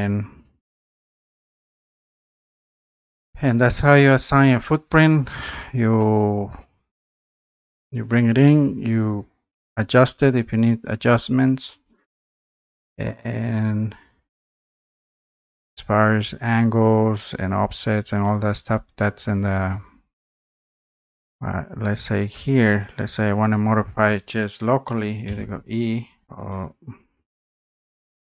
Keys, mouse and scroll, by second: 0.4 click, 1.9 click, 5.9-7.1 drag, 20.7 click, 22.5 click, 23.7 click, 26.3 click, 26.5 right click, 27.3 click.